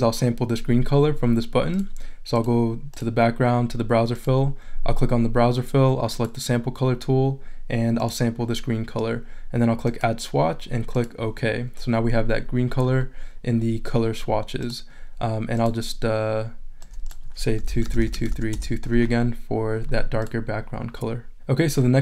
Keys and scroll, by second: 17.3-18.7 typing.